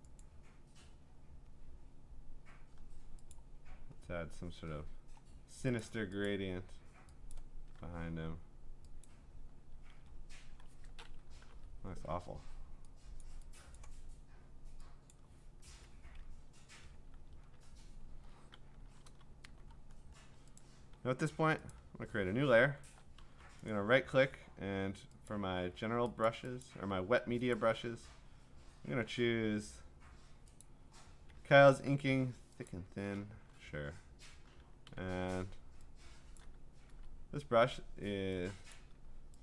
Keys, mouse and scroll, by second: 0.2 click, 1.3-3.2 scroll, 3.4 click, 3.5-5.7 scroll, 5.7 scroll down 10, 5.8 click, 6.3 click, 7.3 click, 9.0 click, 10.2-11.4 scroll, 11.4 ctrl+u, 13.2 click, 13.8 click, 15.1 click, 15.7 Return, 16.8-18.2 alt+scroll, 19.0 b, 19.4-20.6 scroll, 20.6 click, 21.7 click, 22.8-23.1 scroll, 23.2 b, 23.2 middle click, 23.7 right click, 25.3 click, 26.3 click, 26.6 click, 27.5 click, 28.3-29.1 scroll, 29.5-30.6 scroll, 30.6 click, 32.7 click, 33.2 click, 34.9 d, 36.4 click, 36.9 ctrl+z, 38.7 click.